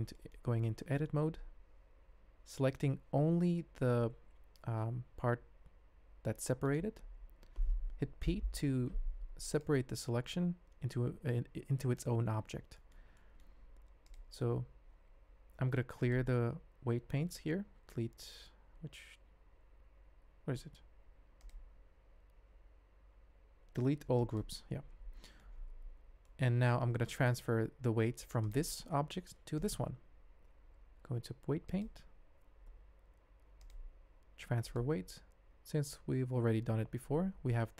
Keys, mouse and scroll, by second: 0.1 shift+click, 1.3 alt+a, 4.2 l, 5.2 g, 8.2 p, 10.4 Tab, 11.2 alt+a, 12.7 shift+click, 13.1 middle click, 14.0 click, 16.1-20.5 drag, 21.3-24.5 drag, 26.2 shift+middle drag, 28.4 click, 29.6 shift+click, 30.9 ctrl+Tab, 33.6-34.8 drag.